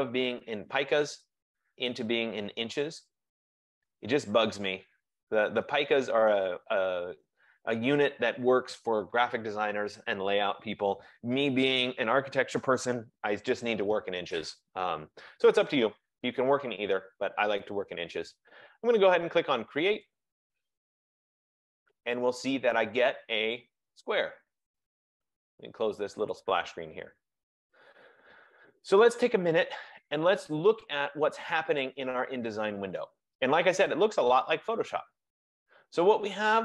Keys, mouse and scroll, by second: 1.4 click, 3.3 click, 8.3-31.5 drag, 34.8 F15.